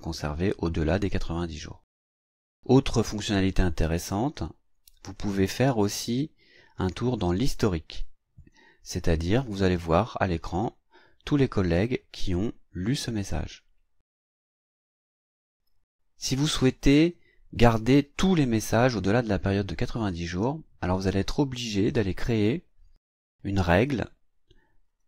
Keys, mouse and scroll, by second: 2.1 click, 3.8 click, 5.0 right click, 8.4 click, 15.0 click, 19.8 click, 22.1 click, 24.9 right click.